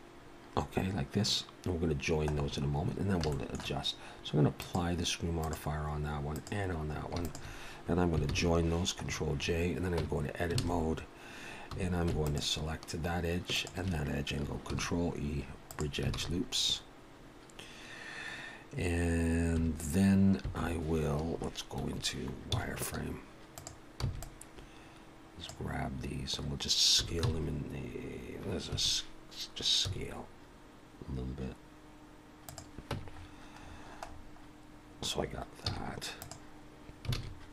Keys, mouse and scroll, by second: 0.5-1.6 scroll down 2, 2.3-3.1 scroll down 6, 3.3 shift+middle click, 4.6 click, 5.4 click, 7.0 click, 7.2 shift+click, 7.6 shift+click, 8.2 ctrl+j, 9.1-9.8 scroll up 6, 10.0 Tab, 10.0 scroll up 3, 10.6 alt+a, 11.7 2, 12.3 alt+shift+click, 13.6 alt+shift+click, 14.7 ctrl+e, 16.2 alt+a, 16.6-17.7 scroll up 2, 19.6 1, 20.4 b, 22.6 z, 24.1 b, 26.1-27.0 scroll up 1, 27.0 s, 29.8 s, 33.1 Tab, 33.1-35.7 scroll down 10, 35.7-36.0 scroll down 2, 35.7 z, 37.2 alt+a.